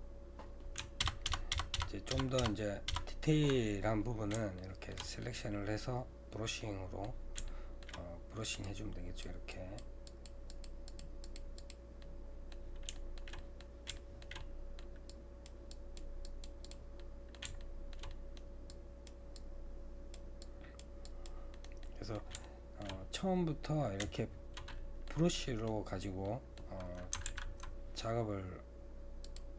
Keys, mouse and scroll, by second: 0.4-1.0 scroll down 1, 1.0 ctrl+KP_Add, 1.3-2.9 ctrl+KP_Add, 4.6 shift+middle click, 5.2-6.6 scroll up 2, 6.6-8.7 middle drag, 8.7-12.0 drag, 12.0-15.1 middle drag, 15.1-17.0 drag, 17.0-18.7 middle drag, 18.7-21.5 drag, 21.5-23.0 middle drag, 23.0-24.7 scroll down 2, 24.7-27.3 middle drag, 27.3 alt+a.